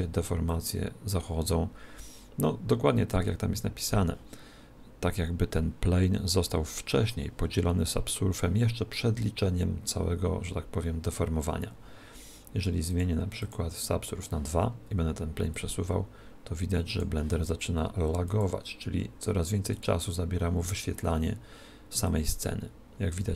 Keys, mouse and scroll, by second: 0.6 click, 12.9 click, 15.7 click, 18.3 click, 22.6 click.